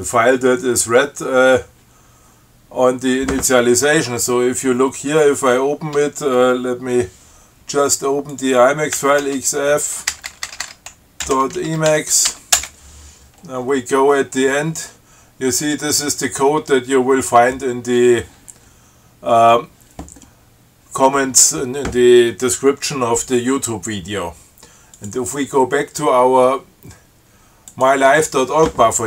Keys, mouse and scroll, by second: 8.6 ctrl+click, 9.2 ctrl+x, 9.5 ctrl+f, 10.3-13.0 typing, 13.6 scroll down 2, 14.6-15.1 scroll up 2, 24.2 scroll up 2, 25.2 click, 28.0 click.